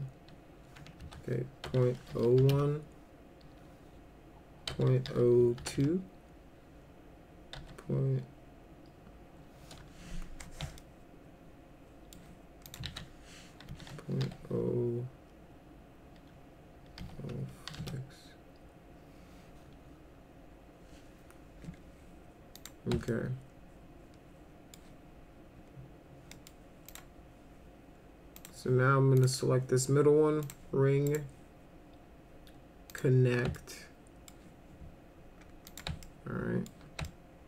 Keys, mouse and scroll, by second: 1.0 ctrl+a, 1.4-2.9 typing, 4.7 ., 5.1 0, 5.6 2, 7.6 ., 10.8-12.1 alt+middle drag, 12.7 click, 12.9 ctrl+a, 13.7 ., 14.2 0, 17.0 0, 17.7 6, 22.6 click, 23.1-24.8 alt+middle drag, 26.3 middle click, 26.9 click, 28.4 click, 29.2 click, 30.4 click, 31.1 right click, 32.9 click, 33.5 alt+middle click, 35.7 click, 36.0 alt+middle click, 37.0 alt+middle click.